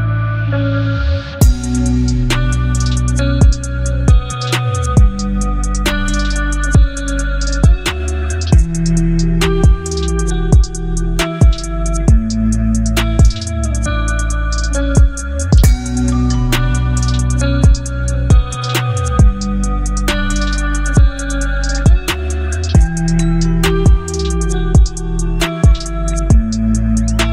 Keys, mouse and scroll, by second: 1.8-7.0 alt+drag, 7.0 ctrl+t, 10.7-15.9 shift+drag, 15.9 Return, 18.3 Return, 18.4-23.3 alt+drag, 23.3 ctrl+t, 26.1-27.3 shift+drag.